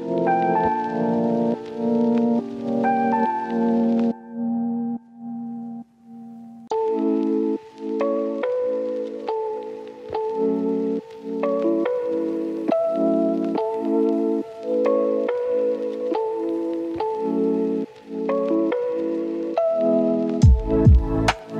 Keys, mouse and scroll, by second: 0.3 ctrl+shift+click, 0.7-1.1 scroll up 1, 1.1 click, 3.0 scroll down 1, 3.2 scroll up 1, 3.3 Tab, 3.8-4.1 scroll down 1, 4.1 right click, 5.1 click, 5.3 right click, 6.4 click, 6.9 right click, 8.2 scroll up 1, 8.2 click, 8.9 right click, 9.5-9.8 scroll up 1, 10.9 right click, 11.3 scroll up 1, 11.5 ctrl+shift+click, 11.7 right click, 11.9-12.3 scroll up 1, 12.3 click, 13.4-14.9 right drag, 15.2 ctrl+shift+click, 15.3 right click, 15.7 click, 17.0 right click, 18.1 ctrl+shift+click, 18.3 right click, 18.9 click, 19.7 scroll down 1, 19.8 right click, 20.5 scroll up 1, 20.8 ctrl+shift+click.